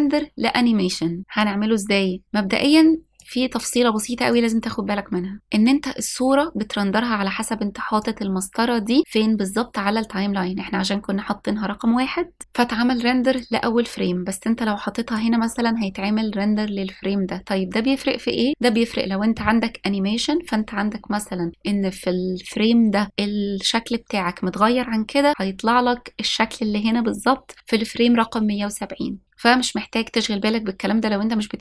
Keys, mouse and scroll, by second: 4.0-5.2 drag, 8.8-16.1 drag.